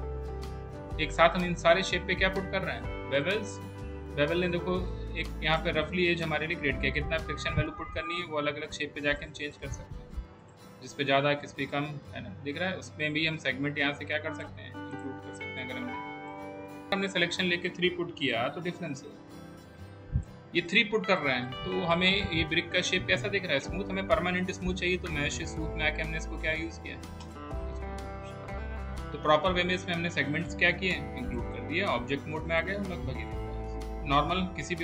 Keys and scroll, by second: 18.5 3, 33.9 space.